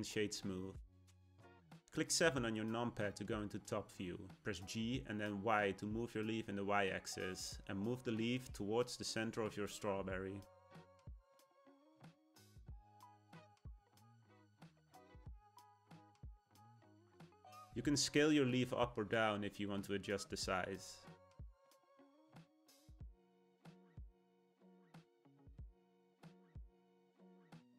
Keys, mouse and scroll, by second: 1.7 KP_7, 3.0 shift+middle click, 3.8-5.5 scroll down 1, 5.5 g, 11.9-14.9 middle drag, 15.3 Tab, 16.5 a, 18.1 s, 26.2-27.6 middle drag, 27.6 Tab.